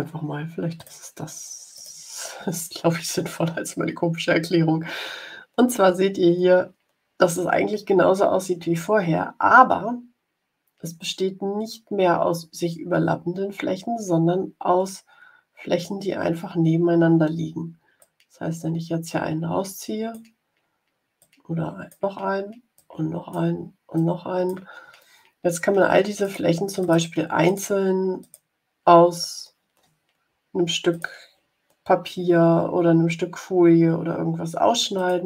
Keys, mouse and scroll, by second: 0.7 click, 1.6 click, 17.9-20.2 drag, 21.1 click, 22.7 click, 23.9 click, 26.1 click, 26.7 click, 27.4 click, 28.1 click, 30.8 click, 34.9 click.